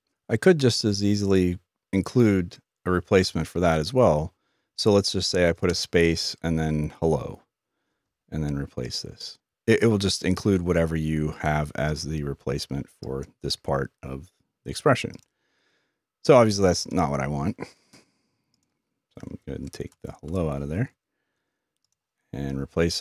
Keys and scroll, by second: 6.4-7.1 typing, 22.7 typing.